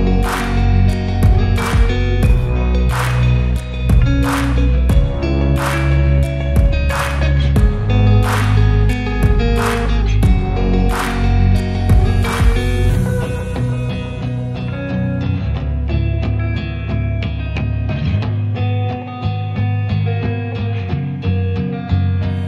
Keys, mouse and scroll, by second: 0.0 Tab, 0.3 click, 0.4-1.1 scroll down 4, 0.7 click, 1.1 shift+middle click, 1.3 scroll up 1, 1.4 click, 1.5 s, 2.0 click, 2.2 s, 3.8 click, 4.0-4.4 scroll down 2, 4.5 Tab, 4.9 Tab, 5.0 click, 5.1 scroll up 2, 5.2 Tab, 5.7 3, 6.0 click, 6.6 ctrl+click, 7.1 shift+d, 7.4 p, 7.8 Tab, 7.9 click, 8.1 Tab, 8.3 a, 8.4 e, 9.6 middle click, 9.9-10.3 scroll up 9, 10.3 shift+middle click, 10.7 Tab, 11.1 KP_0, 11.6 click, 11.7 click, 11.9 shift+drag, 12.2 shift+click, 12.3 shift+click, 12.5 scroll down 2, 12.8 ctrl+c, 13.0 ctrl+v, 13.9 r, 16.6 r, 17.7 shift+click, 17.8 shift+click, 18.0 shift+click, 18.2 shift+click, 18.4 s, 19.7 g, 20.3-21.0 scroll down 5, 20.5 shift+middle drag, 21.0 ctrl+c, 21.2 g.